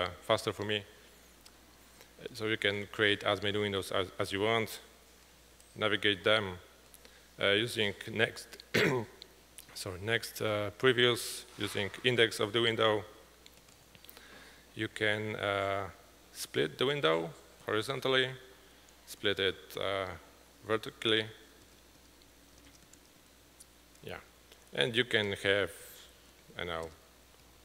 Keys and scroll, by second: 2.9 typing, 5.5 typing, 7.7 typing, 12.2 typing, 13.7 typing, 17.5 `, 24.7 alt+Left, 24.7 typing, 25.1 alt+Up, 25.8-27.6 typing, 26.9 Return, 27.5 alt+Down.